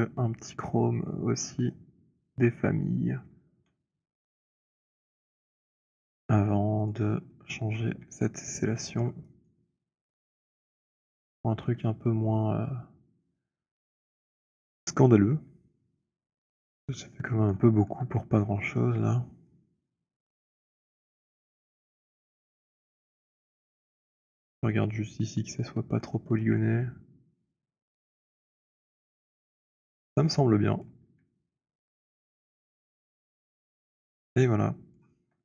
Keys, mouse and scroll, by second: 2.3 middle click, 4.2 click, 4.2 right click, 6.7 click, 7.9 scroll, 8.2 alt+click, 9.4 alt+middle click, 9.7 alt+right click, 10.2 alt+click, 10.6 alt+middle click, 11.1 alt+click, 13.2 click, 17.5-18.1 scroll, 18.1 middle click, 18.3 middle click, 19.0 middle click, 20.0 middle click, 20.9 middle click, 23.0 middle click, 24.2-24.7 scroll, 24.7 alt+click, 25.9 middle click, 29.0 middle click, 29.3 w, 29.8 middle click, 30.2 middle click, 30.4-31.2 scroll, 30.8 click, 31.3 middle click, 34.3 click, 35.1 alt+click, 35.1 alt+middle click.